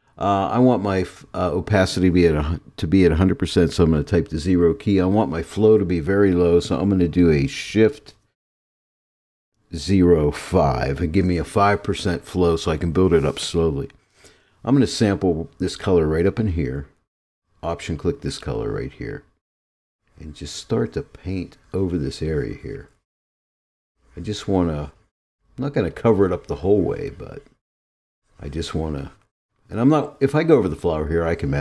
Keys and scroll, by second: 4.4 0, 9.9 shift+0.